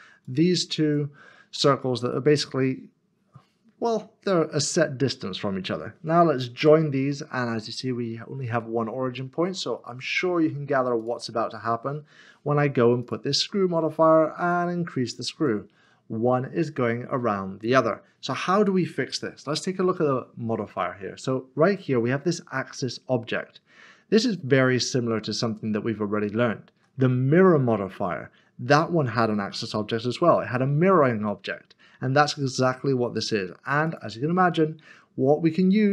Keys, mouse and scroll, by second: 0.2 click, 1.5 click, 2.5 middle click, 6.2 middle click, 11.0 click, 16.1 click, 19.2 middle click, 30.2 middle click, 30.3-31.1 scroll up 1, 31.1 middle click, 33.8 middle click.